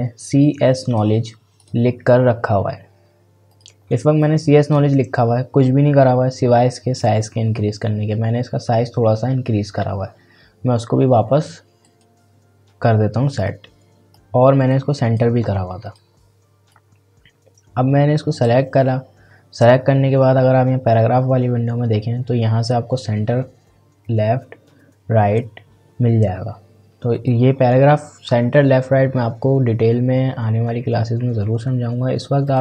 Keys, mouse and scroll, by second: 11.8-20.7 drag, 27.1 click, 32.4 click.